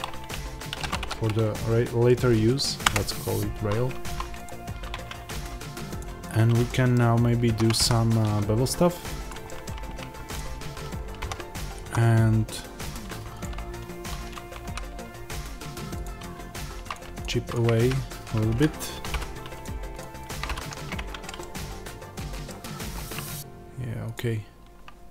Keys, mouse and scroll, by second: 2.8 Return, 2.8-4.3 drag, 4.8 Tab, 5.3-5.9 scroll up 1, 5.9 click, 6.5-9.2 middle drag, 7.0-7.4 scroll up 2, 7.4 ctrl+b, 9.2 click, 9.3 middle click, 9.7-10.2 scroll, 10.2 click, 11.1 ctrl+b, 13.3 click, 15.9 x, 17.0 shift+click, 17.7 g, 18.5 Escape, 19.0 f, 19.5 click, 19.9 shift+click, 20.3 f, 20.6 scroll down 1, 20.8 Tab, 21.3-24.0 middle drag, 22.4-22.8 scroll down 2, 22.8-24.0 scroll up 2, 24.0 click, 25.0 scroll up 1.